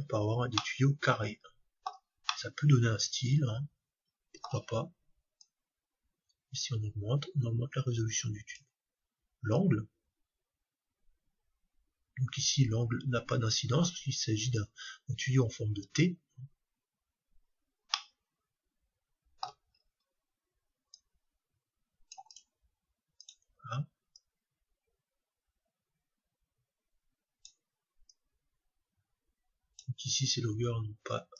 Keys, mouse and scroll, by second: 0.5-5.3 middle drag, 5.4-7.3 drag, 9.6-11.5 drag, 16.9-19.4 middle drag, 19.5-20.9 middle drag, 20.9-26.0 drag, 28.1-30.0 drag.